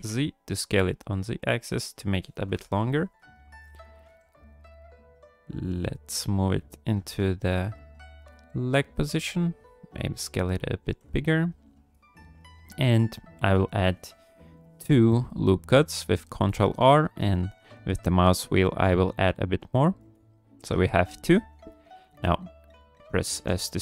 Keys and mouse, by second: 2.5 KP_1, 3.3 shift+click, 4.0 g, 6.7 ctrl+click, 7.2 shift+click, 8.3 g, 9.1 s, 10.0 g, 10.8 s, 11.6 ctrl+click, 13.8 ctrl+r, 23.3 s.